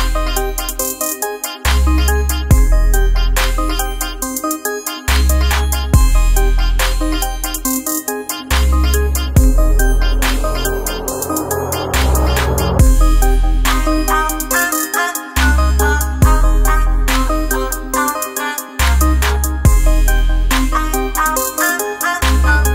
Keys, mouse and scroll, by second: 1.1-22.7 drag, 12.9 typing.